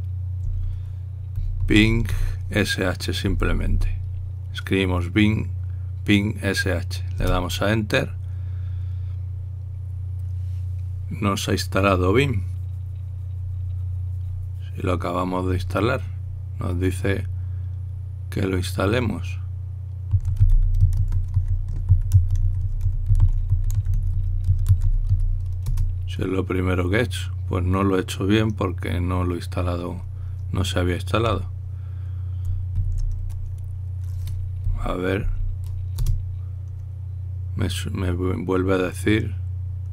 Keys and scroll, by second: 1.1 Delete, 2.8 typing, 4.1 Right, 4.5 Right, 6.9 typing, 8.0 Return, 20.8-26.3 typing, 26.4 Return, 33.5 ctrl+l, 35.4 Up, 36.0 Up, 36.8 Return.